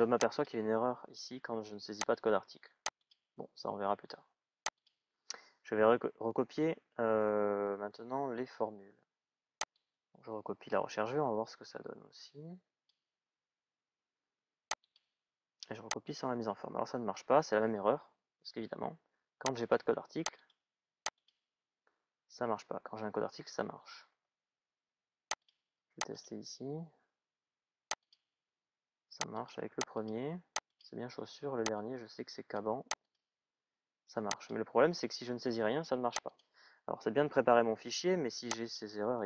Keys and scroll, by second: 37.1 Delete.